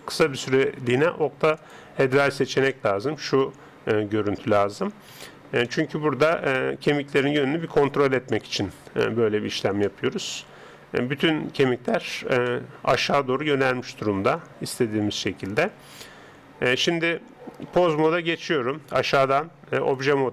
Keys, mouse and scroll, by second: 2.7-7.8 middle drag, 7.8-9.9 right drag, 9.2 Tab, 9.9-16.9 middle drag, 16.9 Tab, 19.7 click.